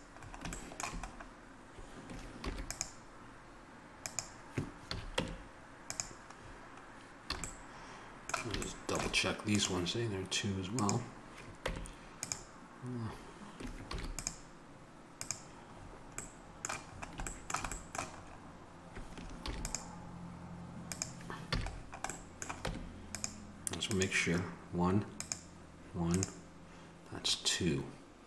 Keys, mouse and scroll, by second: 0.3 middle click, 2.4 ctrl+r, 4.8 a, 5.1 Tab, 7.3 a, 7.5 middle click, 9.5 right click, 11.6 Tab, 13.8 ctrl+r, 19.3 ctrl+r, 21.4 a, 21.7 middle click, 22.6 Tab, 23.9 right click.